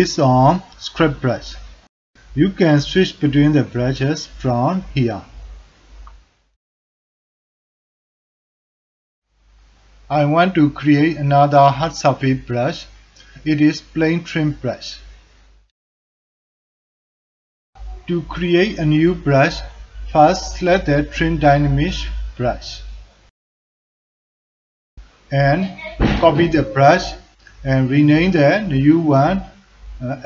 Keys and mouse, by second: 2.2 ctrl+alt+click, 3.2-4.4 drag, 5.8 click, 7.0 click, 7.4-9.5 drag, 9.6-11.1 drag, 11.3 alt+click, 11.9-13.4 drag, 13.7 ctrl+alt+click, 14.0-15.5 drag, 15.7-16.9 drag, 17.1 alt+click, 17.6 ctrl+click, 17.9 alt+click, 18.8 click, 20.0-22.9 drag.